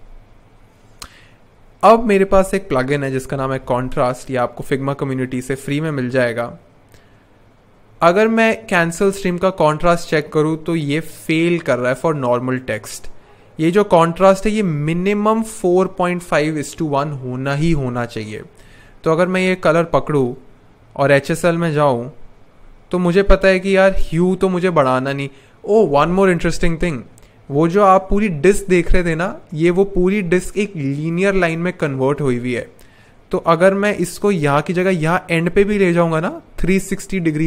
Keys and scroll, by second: 2.3 super+/, 2.6-4.1 typing.